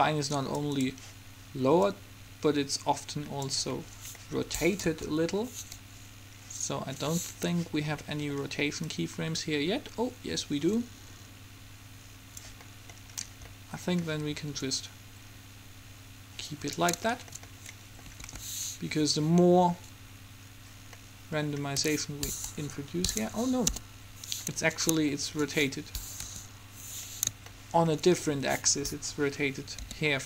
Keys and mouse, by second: 4.2-5.7 middle drag, 5.0 KP_1, 7.2-8.4 middle drag, 9.0-10.2 middle drag, 10.2 click, 12.7-13.9 middle drag, 14.7-16.7 drag, 18.3 alt+a, 22.7 Escape, 22.7 KP_3, 23.7 KP_1, 26.4 KP_7, 30.0 r.